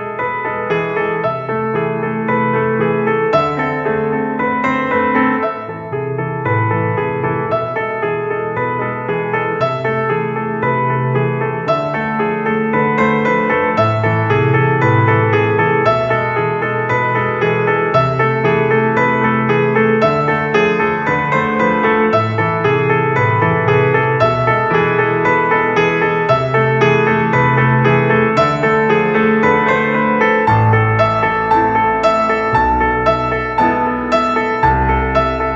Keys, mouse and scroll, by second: 0.3-1.3 middle drag, 1.7-2.3 drag, 3.4 click, 3.9 middle click, 4.1-4.7 drag, 4.7 middle click, 4.9 click, 5.4 middle click, 5.9-6.5 drag, 6.9 click, 7.6 click, 8.8 click, 11.9 click, 13.1-14.3 drag, 14.7 click, 15.3-17.3 middle drag, 17.3-18.5 drag, 20.1 click, 20.7-22.4 middle drag, 22.4-23.4 drag, 23.4 middle click, 23.5 g, 23.7 x, 24.0 Escape, 24.1 Escape, 24.7 g, 25.9-27.0 drag, 27.0 KP_5, 28.8 g, 30.0 click, 32.6 click, 33.3 middle click, 33.5 click, 34.0-34.8 middle drag, 34.9 middle click.